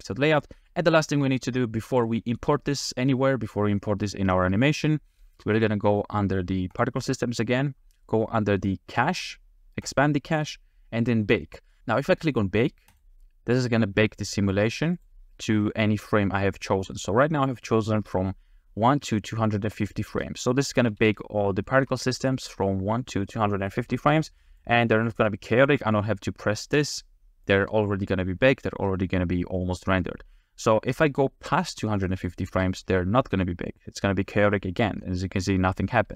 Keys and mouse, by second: 0.0-0.6 drag, 0.9 shift+middle click, 1.9 click, 2.4 g, 2.7 click, 5.3 space, 15.0 click, 20.2 space, 20.8 a, 21.0 a, 21.7 shift+middle drag, 22.2-22.7 drag, 22.2-22.7 middle drag, 22.2-22.7 right drag, 23.9 space, 24.6-25.8 drag, 27.5-31.2 drag, 31.9 click, 32.5 space.